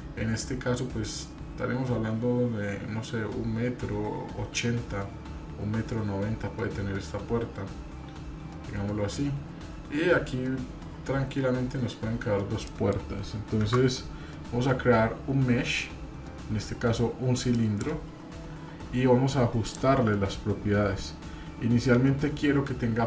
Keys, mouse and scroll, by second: 12.7 middle click.